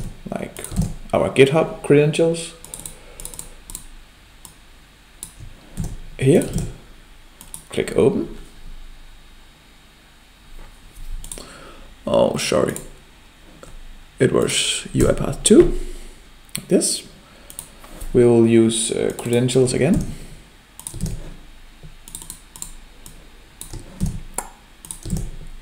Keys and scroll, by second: 0.7 ctrl+v, 5.8 ctrl+c, 6.5 ctrl+v, 19.9 ctrl+c, 21.0 ctrl+v, 24.1 ctrl+c, 25.1 ctrl+v.